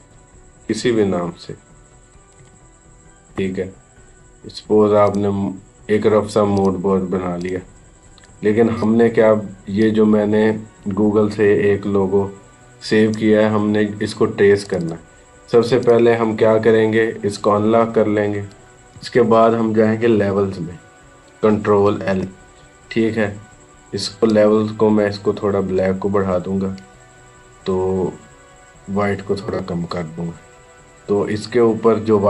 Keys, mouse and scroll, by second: 3.1 Return, 4.9-14.5 drag, 18.8 ctrl+=, 21.7 ctrl+l, 24.1-31.9 drag.